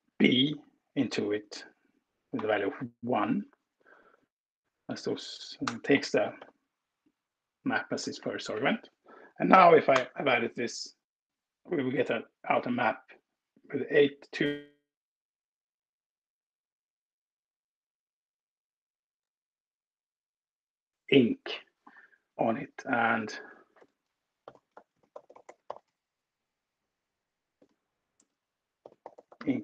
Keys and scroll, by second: 0.3 space, 2.1 1, 3.5 Left, 3.9 Left, 4.6 Left, 4.7 Left, 5.6 space, 6.3 f, 7.1 Left, 7.5 Left, 7.6 Left, 8.1 Right, 8.5 Right, 9.7 alt+Return.